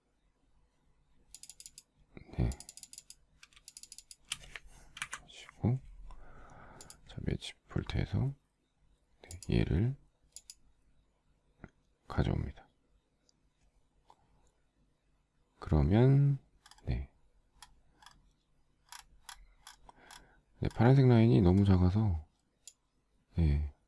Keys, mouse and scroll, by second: 3.8 shift+click, 4.0 shift+click, 4.0 shift+double click, 4.1 shift+click, 5.1 Delete.